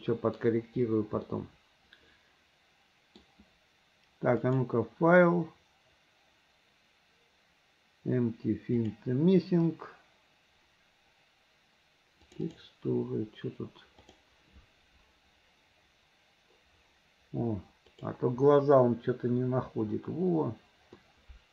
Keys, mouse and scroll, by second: 0.0 middle click, 1.3-3.2 middle drag, 4.4-9.2 drag, 21.0-21.5 middle drag.